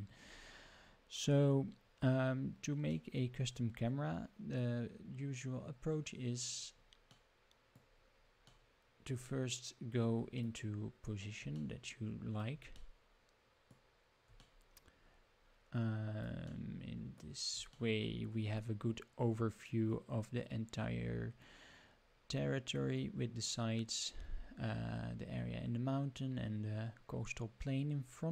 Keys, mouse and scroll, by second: 6.2 middle click, 7.1 middle click, 8.5-10.4 middle drag, 10.8 scroll up 2, 11.5-12.4 shift+middle drag, 12.7 middle click, 14.4-16.3 shift+middle drag, 16.5 middle click, 17.7-18.6 shift+middle drag.